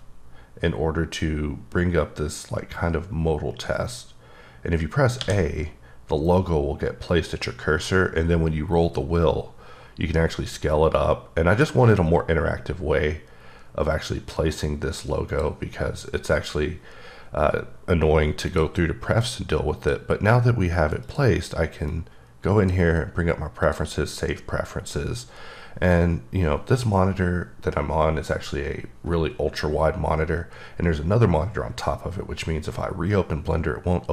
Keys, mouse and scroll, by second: 5.2 a, 7.1-9.8 scroll up 19, 9.8-10.1 scroll down 3, 10.3 scroll up 1, 10.4-11.3 scroll down 5, 11.3-12.4 scroll up 4, 12.4-13.0 scroll up 4, 13.0-14.1 scroll down 6, 15.3 click, 18.5 click, 19.2 click, 21.0 click, 21.9 click, 23.6 click.